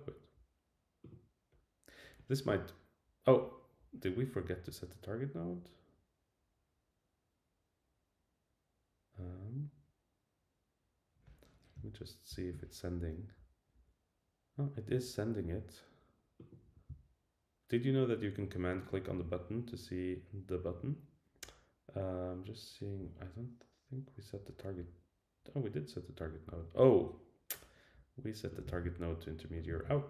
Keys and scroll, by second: 12.3 alt+super+i, 28.7 super+c, 29.8 super+v.